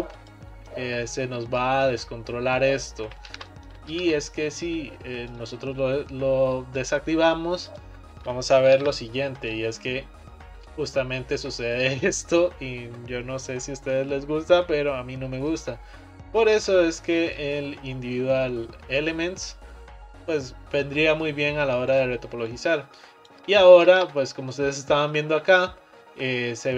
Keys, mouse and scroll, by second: 0.9 middle click, 1.5 click, 1.9 click, 3.4 ctrl+z, 3.7 middle click, 4.0 ctrl+z, 5.4-7.8 drag, 8.8 ctrl+r, 16.6 ctrl+z, 17.4-20.4 drag, 22.0 click, 22.5 click, 24.0 ctrl+z, 24.3-26.7 middle drag.